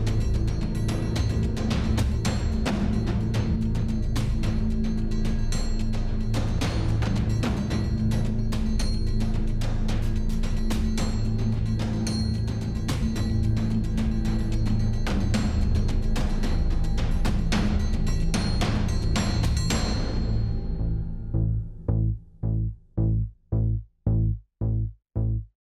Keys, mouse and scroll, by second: 1.5 s, 2.9 click, 3.4 click, 3.5 middle click, 4.5 middle click, 5.8 middle click, 8.0 middle click, 8.5 middle click, 8.9 middle click, 9.7 middle click, 11.4-12.0 drag, 12.2 alt+h, 12.5 Tab, 13.2 a, 13.7 click, 15.4 click, 16.9 click, 16.9 g, 19.0 click, 19.1 s, 22.2 click, 22.4 s, 24.3 s.